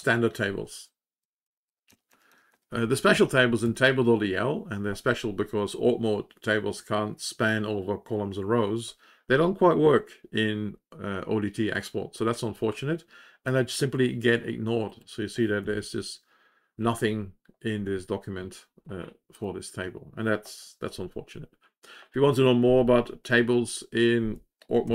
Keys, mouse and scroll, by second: 14.9 click, 16.6 Page_Down, 19.2 click.